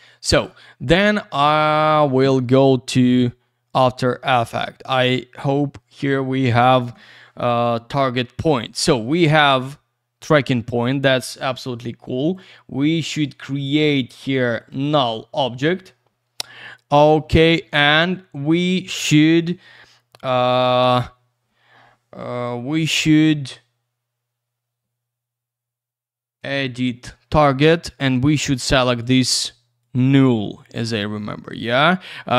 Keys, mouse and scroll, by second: 0.3 click, 4.7 click, 12.2 right click, 12.3 right click, 14.7 click, 14.8 click, 26.4 click, 28.8 click, 29.0 click, 29.8 click, 29.9 click.